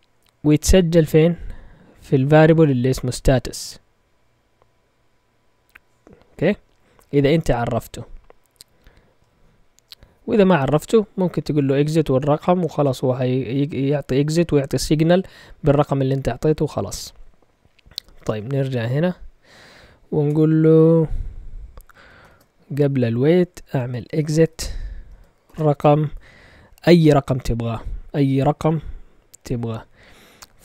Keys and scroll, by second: 18.4 ctrl+Tab, 20.2 Delete, 22.2 0, 23.6-25.4 typing.